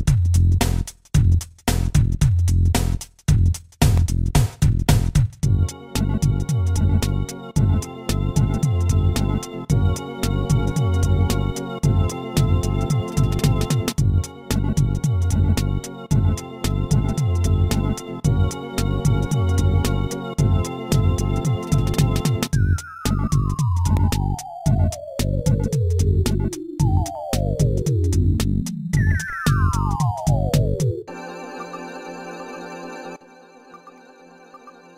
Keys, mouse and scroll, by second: 3.0 click, 3.1 click, 3.2 double click, 5.8-6.5 scroll down 1, 8.5 click, 8.8 click, 10.6 ctrl+s, 10.8 click, 13.3 0, 15.4 s, 16.8 click, 17.2 ctrl+s, 17.4 click, 18.1 middle click, 21.3-23.1 typing, 24.6 click, 25.0 click, 25.4 scroll down 1, 26.3 scroll down 1, 26.8 right click, 27.5 shift+d, 28.8 shift+d, 30.1-30.8 typing, 31.8 right click, 32.6 right click, 33.1 typing, 34.5 click, 34.8 ctrl+s.